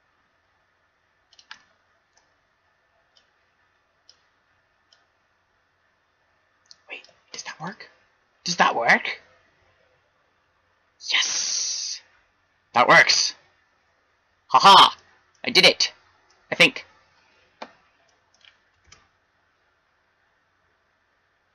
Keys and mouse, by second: 1.5-3.5 middle drag, 3.5-5.6 drag, 6.6 click, 7.4-9.8 middle drag, 15.6 middle click, 19.7 shift+z.